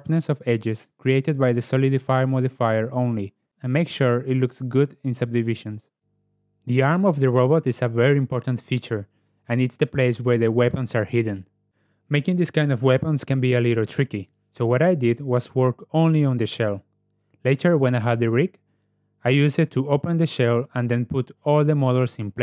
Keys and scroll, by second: 4.2 ctrl+w, 12.7 ctrl+w, 14.1 ctrl+w, 14.9 Tab, 15.6 g, 16.1 z, 16.9 g.